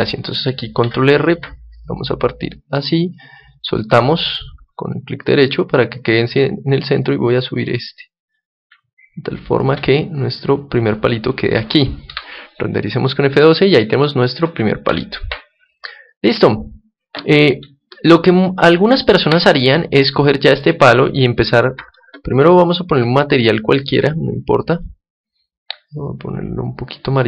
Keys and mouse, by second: 0.7 ctrl+r, 3.2-4.9 right drag, 4.0-6.8 middle drag, 5.9-7.7 right drag, 6.9-9.7 drag, 9.6 Tab, 10.2 middle click, 11.3 middle click, 14.8 Escape, 16.0-18.0 drag, 17.8-19.7 middle drag, 19.9-22.8 drag, 22.9-24.7 middle drag, 23.7-26.6 drag.